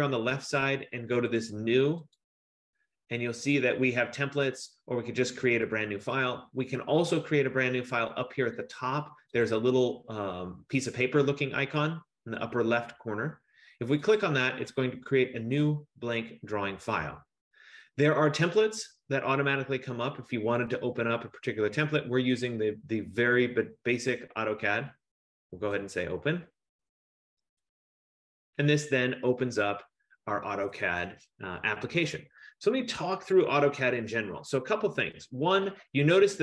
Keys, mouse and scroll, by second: 2.4 click, 9.5 click, 13.3 F15, 14.3 click, 26.3 click.